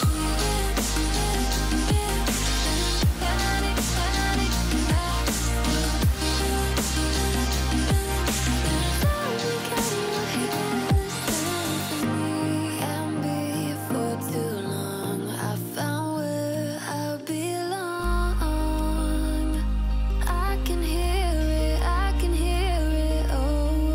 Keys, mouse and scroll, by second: 0.0-0.6 alt+scroll up 2, 0.3 F7, 0.6-1.5 click, 1.5 alt+scroll down 1, 1.7 alt+scroll up 1, 1.8 click, 2.8 alt+scroll down 1, 3.0 click, 3.2-3.7 shift+click, 5.1 click, 5.8 click, 6.0-6.3 alt+scroll down 2, 6.1 click, 6.5 alt+scroll up 1, 7.1 click, 7.3 alt+scroll up 1, 7.7 alt+scroll down 1, 8.3 click, 8.6 click, 8.9 alt+scroll up 1, 9.1 click, 9.7 alt+scroll up 1, 10.0-10.7 click, 11.3 alt+scroll up 1, 11.7 click, 11.9 alt+scroll up 1, 12.9 click, 14.0 click, 14.3 click, 15.0 alt+scroll up 1, 15.1 F7, 15.2 alt+scroll down 1, 15.5 alt+scroll up 1, 16.5 click, 16.8 click, 17.6 click, 17.9 alt+scroll up 1, 18.0 click, 18.5 alt+scroll down 1, 18.9 click, 19.4 alt+scroll up 1, 19.8 click, 20.0 alt+scroll down 1, 20.1 click, 20.4 alt+scroll up 1, 20.5 click, 21.6-22.0 alt+scroll up 2, 21.7 click, 22.4-22.8 alt+scroll up 1, 22.9 click.